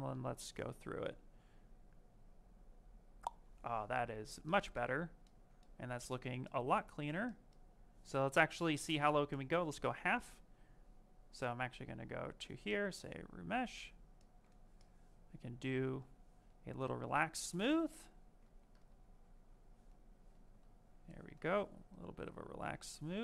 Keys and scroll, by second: 18.3 ctrl+z, 22.9 ctrl+z.